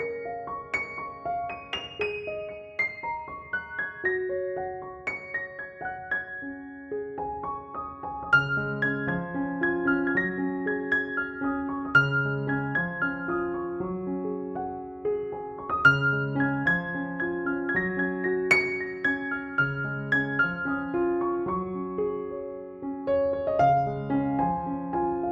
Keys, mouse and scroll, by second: 0.8 e, 1.6 ctrl+=, 3.8 ctrl+j, 5.3 ctrl+j, 5.7 click, 6.4 alt+t, 7.1 click, 12.3 click, 14.6 click, 15.9 alt+i, 16.2 alt+y, 17.3 click, 22.0 click, 25.0 space, 25.1 click, 25.2 space.